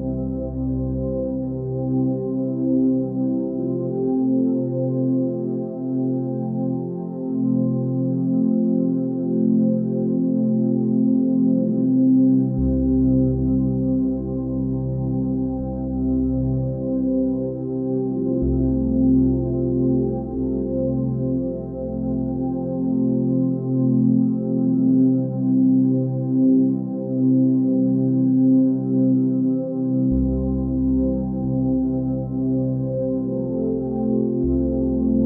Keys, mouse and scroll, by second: 0.6 scroll up 1, 1.3 s, 9.5-10.1 scroll up 1, 10.2 g, 14.7 scroll down 2, 15.2 Tab, 15.8-16.7 middle drag, 16.7 click, 17.1-18.6 middle drag, 18.6 KP_1, 20.7 scroll up 2, 21.3 scroll up 1, 21.4 scroll down 2, 22.0-22.9 shift+middle drag, 22.9 scroll up 3, 23.7-25.6 middle drag, 25.6-26.1 scroll down 2, 26.3-26.7 scroll up 1, 27.0 click, 27.6 Tab, 28.4 KP_1, 30.3 ctrl+KP_3, 32.5 ctrl+r.